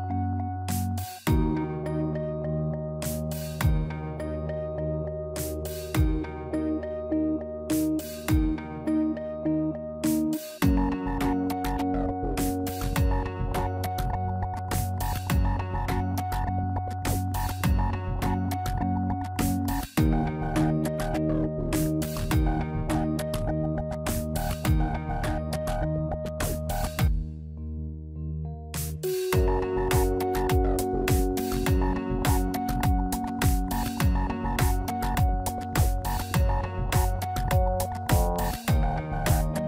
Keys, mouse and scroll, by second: 0.1 scroll down 1, 0.8 scroll down 1, 0.8 KP_3, 1.8 KP_1, 2.4-2.9 scroll down 2, 2.7 shift+middle click, 3.8 click, 4.7 click, 11.5 KP_Divide, 11.9 middle click, 13.0 KP_Divide, 13.5 middle click, 14.8 click, 16.5 middle click, 19.0 click, 19.7 middle click, 21.0 scroll up 2, 22.1 scroll up 1, 22.6 click, 23.6 middle click, 24.1 Tab, 24.9 shift+click, 25.9 click, 28.5 middle click, 30.6 click, 31.2 shift+middle click, 31.7 middle click, 33.1 scroll down 2, 33.6 middle click, 33.9 middle click, 37.6 click, 38.2 Tab, 38.4-39.1 scroll up 4, 38.9 shift+middle click.